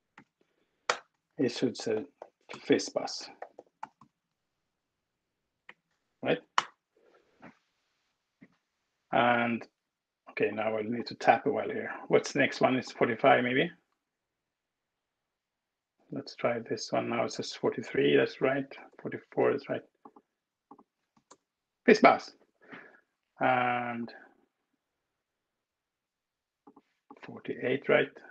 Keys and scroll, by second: 0.8-4.3 typing, 5.5 Right, 5.8 Tab, 6.5 alt+Return, 16.2 alt+Return, 18.9 alt+Return, 21.2 alt+Return, 22.1 Escape, 27.6 alt+Return.